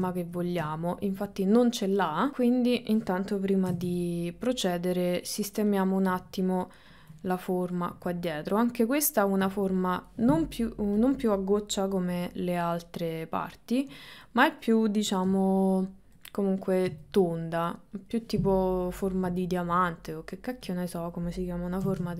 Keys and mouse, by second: 0.2 ctrl+middle click, 0.7 shift+middle click, 3.7 g, 6.1 g, 7.7 click, 9.5 g, 12.1 g, 14.3 click, 15.3 g, 16.7 click, 16.9 g, 20.1 click, 20.7 click, 21.9 g.